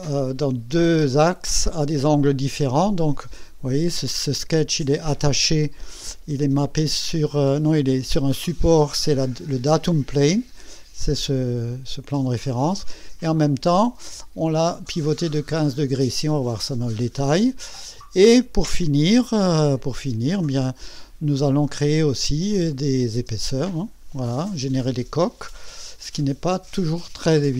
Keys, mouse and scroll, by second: 11.0-12.3 drag, 12.5-14.3 drag, 15.9-17.1 drag, 19.0 space, 19.7 click, 20.0 space, 22.8 click, 23.1 space, 23.6-27.5 drag.